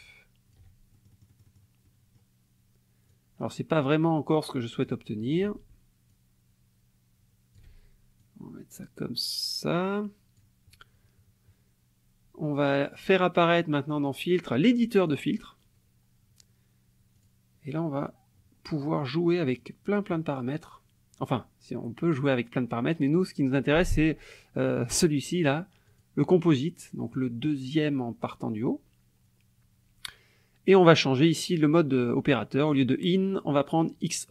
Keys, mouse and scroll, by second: 0.9 ctrl+shift+click, 1.8 ctrl+shift+click, 3.1-5.0 drag, 6.1-7.7 ctrl+shift+drag, 8.2-10.6 drag, 13.4 click, 15.0 click, 17.2 click, 19.6 click, 22.2 click, 25.9 click.